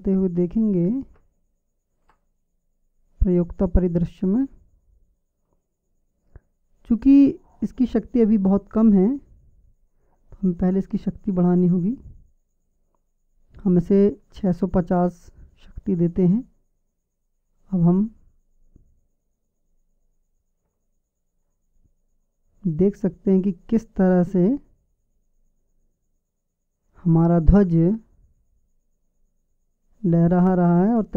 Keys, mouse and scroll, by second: 2.7-3.8 middle drag, 7.7-11.5 middle drag, 11.5-14.2 right drag, 13.2-14.2 middle drag, 14.2-16.0 drag, 16.0-20.6 middle drag, 20.6-22.6 drag, 22.6-25.5 middle drag, 25.9-27.2 middle drag, 27.7-30.2 drag.